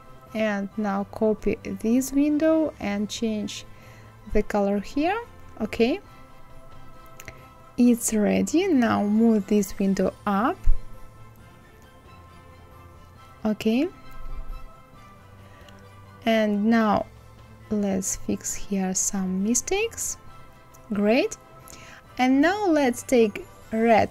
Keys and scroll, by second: 10.0 Left, 10.6 Right, 10.7 Left, 11.0 Up, 11.2 Right, 11.4 Left.